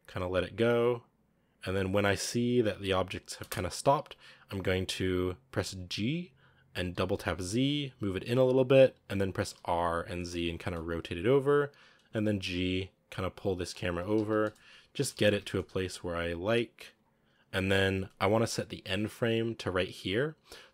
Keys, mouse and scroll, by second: 3.3 space, 5.4 g, 9.4 r, 11.9-16.0 typing.